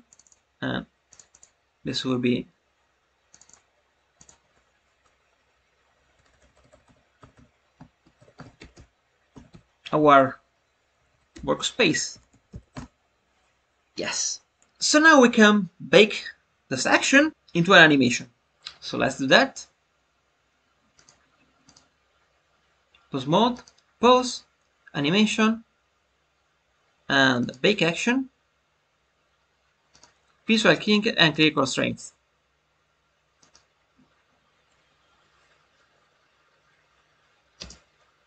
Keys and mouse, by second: 0.0-1.2 drag, 1.3 click, 3.4-14.6 drag, 21.0-21.7 drag, 23.4-35.1 drag.